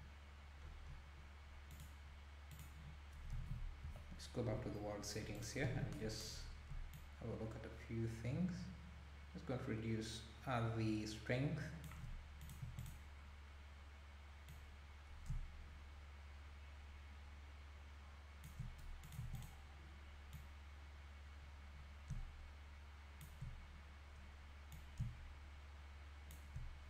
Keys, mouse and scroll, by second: 0.6 scroll up 1, 1.7-3.3 drag, 3.3 a, 3.8 KP_Decimal, 4.7-5.0 scroll up 3, 5.4 click, 5.7 alt+a, 6.9-10.0 shift+drag, 12.4 click, 14.5-17.5 drag, 19.0 click, 20.3-23.4 drag, 24.7-26.8 drag.